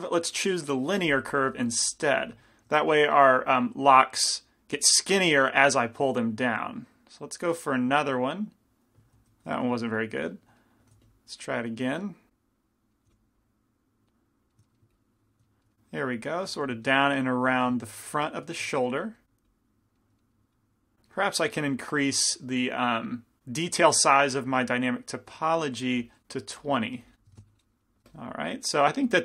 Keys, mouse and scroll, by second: 0.8-2.7 drag, 1.4-2.7 middle drag, 2.3 f, 2.9 f, 5.4-8.4 drag, 9.4 ctrl+z, 11.1 f, 12.3 click, 13.1 f, 13.4 click, 15.0-16.7 drag, 16.7 f, 17.7 f, 18.6 g, 18.8 f, 19.2-23.4 drag, 25.8 click, 26.8-27.9 drag, 27.9-29.2 middle drag, 28.7 f.